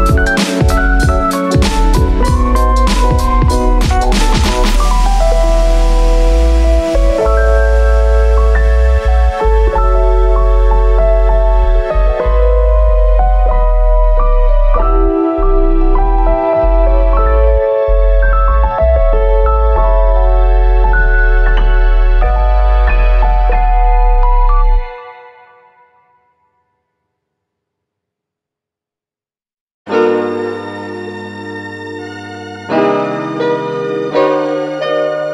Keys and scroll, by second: 26.3 x.